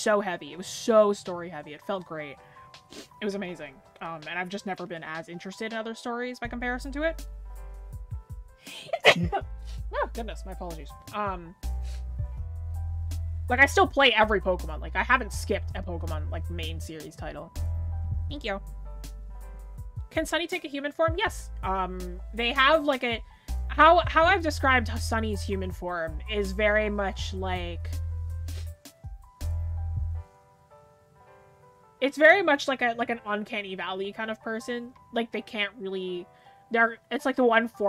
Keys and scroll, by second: 2.7 scroll up 1, 10.5 scroll down 1, 13.7 scroll up 1.